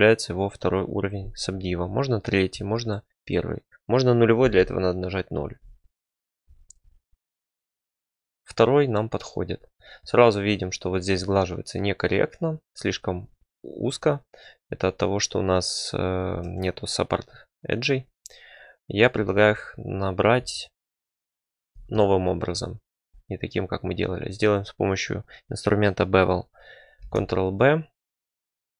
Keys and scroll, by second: 1.6 ctrl+3, 2.5 ctrl+1, 4.4 ctrl+0, 16.4 Tab, 19.1 2, 27.0 ctrl+b.